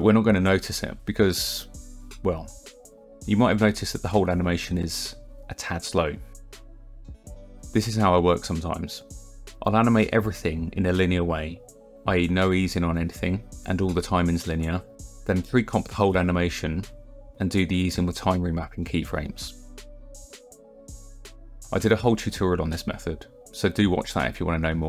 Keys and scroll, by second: 0.9 KP_0, 7.4 KP_0, 11.9 u, 17.3 u, 19.6 =, 19.9 =, 20.3 space.